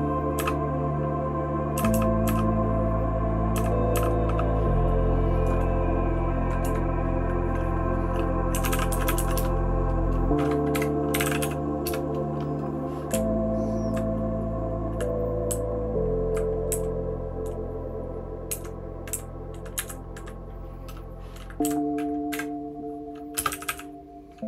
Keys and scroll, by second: 0.4 {, 1.7 {, 1.9 {, 2.2 {, 3.5 {, 3.9 {, 8.3-9.8 typing, 10.8-12.3 typing, 13.1 Down, 13.6 Down, 15.2-16.5 typing, 16.7 Down, 18.5 Up, 19.1 Down, 19.7 Up, 21.6 Down, 22.3 *, 23.3 space, 23.5 e, 23.7 e.